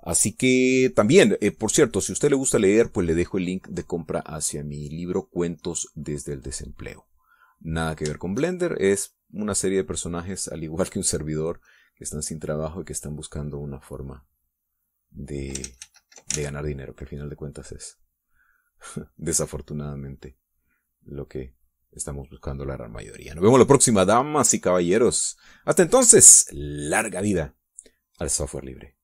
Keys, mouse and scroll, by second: 2.3 middle click, 3.1 middle click, 3.6 middle click, 5.8 click, 7.1-13.2 drag, 13.2-17.0 shift+drag, 17.2 ctrl+z, 18.3-27.2 ctrl+drag, 27.7 click, 28.1 middle click.